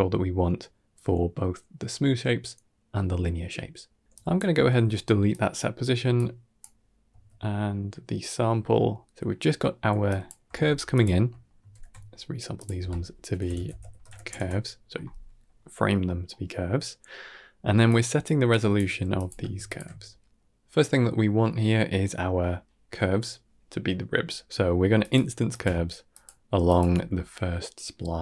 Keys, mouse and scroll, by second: 3.1 middle click, 4.0 drag, 4.5 x, 4.8 middle click, 5.2 drag, 5.7 x, 6.0-6.5 drag, 7.0 x, 8.0-8.7 middle drag, 9.4-9.7 middle drag, 9.9 click, 10.3 g, 11.0 middle click, 11.6 ctrl+j, 12.4 click, 12.6 F2, 15.9 scroll down 1, 16.2 middle click, 16.9 middle click, 17.7 click, 18.4 drag, 18.7 g, 19.5 alt+shift+click, 20.2-20.5 middle drag, 22.0-22.5 middle drag, 24.8-26.7 typing, 24.9 click, 25.4 click, 26.0 click, 26.5 click.